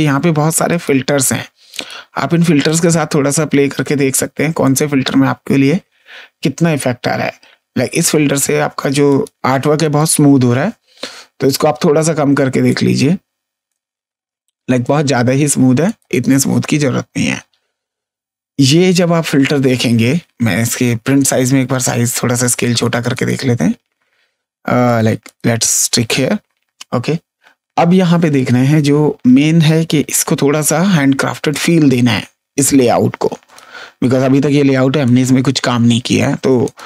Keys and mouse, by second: 4.6 click, 9.0 click, 11.4 click, 12.6 click, 15.8 click, 21.6 click, 24.8 click, 28.3 click, 30.5 click, 33.4 click, 36.6 click.